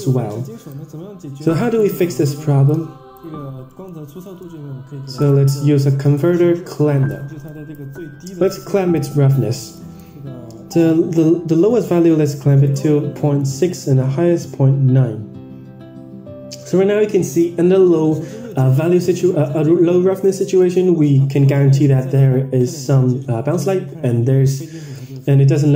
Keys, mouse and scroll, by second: 0.4 click, 1.4 click, 2.6-3.1 drag, 3.6 middle drag, 4.2 shift+a, 7.5-7.8 drag, 8.4 scroll up 4, 8.8-11.7 drag, 12.5-15.8 drag, 18.6 drag, 19.0 middle click, 19.2-19.8 scroll down 10, 20.2 middle click, 20.2-20.8 scroll down 8, 21.0-24.9 middle drag.